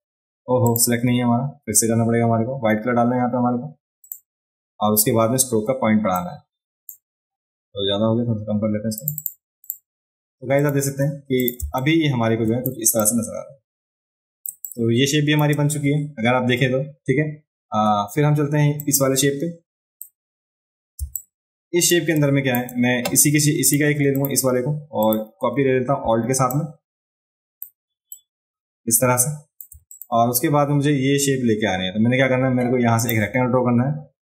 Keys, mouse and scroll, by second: 0.7 click, 4.0 click, 6.2 click, 9.0 click, 9.2 click, 9.6 click, 10.6 click, 11.4 click, 11.6 space, 11.8 click, 13.0 ctrl+click, 14.6 click, 18.8 click, 21.0 space, 21.2 click, 22.1 click, 23.7 click, 24.2 click, 25.0 click, 26.6-27.6 alt+drag, 28.1-29.6 alt+drag, 29.9 click, 33.0 click.